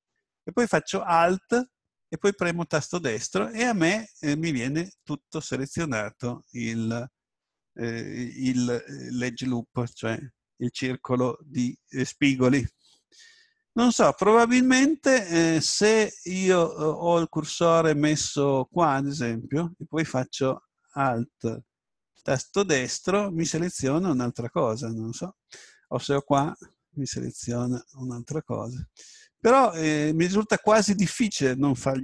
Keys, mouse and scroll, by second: 2.7 right click, 14.6 ctrl+z, 22.2 right click, 26.2 right click, 28.1 right click.